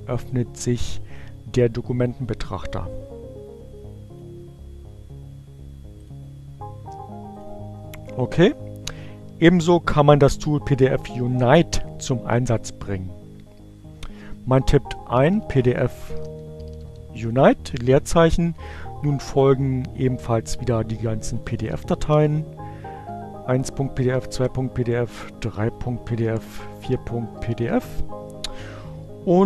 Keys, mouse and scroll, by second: 0.2-4.3 drag, 5.5 click, 7.8 click, 12.9-13.8 typing, 15.5-16.5 typing, 18.0-18.9 typing, 20.4-26.5 typing.